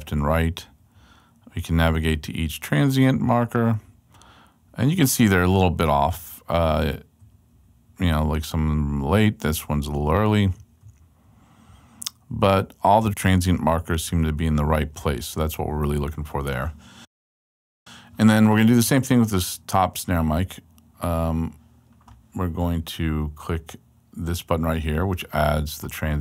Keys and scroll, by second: 0.1 alt+Right, 2.5 alt+Right, 3.7 alt+Right, 4.7 alt+Left, 6.1 alt+Right, 9.9 alt+Right, 12.9 alt+Left.